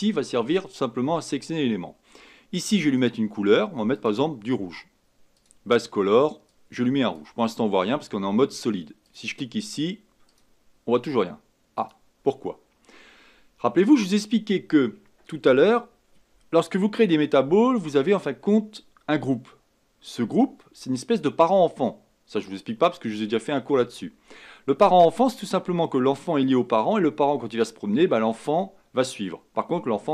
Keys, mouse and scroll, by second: 3.0 click, 3.9-5.4 drag, 9.1 click, 10.4 click, 11.8 click.